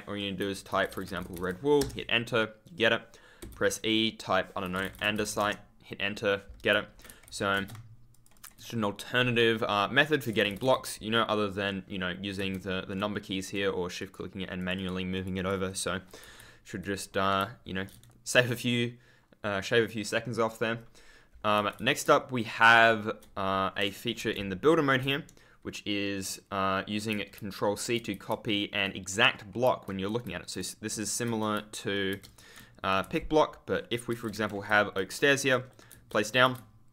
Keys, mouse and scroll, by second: 0.8-1.7 typing, 5.3 Return, 7.2 ctrl+w, 7.5 e, 8.0 shift+click, 13.2 shift+click, 15.6 Escape, 16.2 w, 16.8 ctrl+a, 17.3 ctrl+space, 18.4 F10, 21.5 w, 21.7 ctrl+d, 22.0 ctrl+Tab, 24.1 d, 27.0 ctrl+w, 27.3 ctrl+space, 28.2 ctrl+space, 30.2 shift+w, 30.8 space, 31.2 s, 32.1 super+space, 32.2 super+click, 32.9 e, 34.2 Escape, 34.6 w, 35.1 right click, 35.4 a, 35.5-35.8 scroll down 1, 35.8 ctrl+w, 36.4 e, 36.8 shift+click.